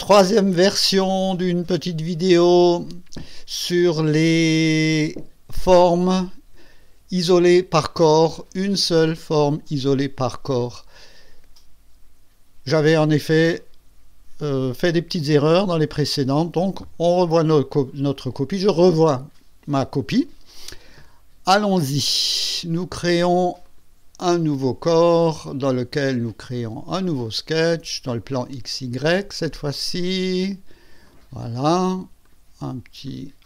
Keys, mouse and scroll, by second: 6.1 click, 10.6 click, 17.6 click, 23.6 click, 26.6 click, 28.1 click, 29.2 click, 31.1 click, 32.2 click, 33.0 click.